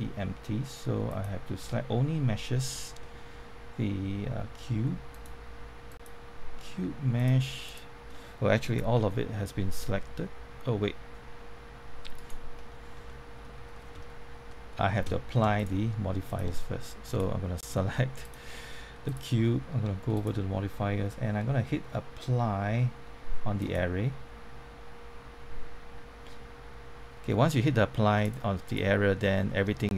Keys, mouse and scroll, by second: 1.1 click, 3.0 middle click, 5.1 click, 8.9 g, 12.1 right click, 12.8 scroll up 1, 13.0 middle click, 15.5 click, 27.6 middle click, 28.2 click, 29.2-29.9 middle drag.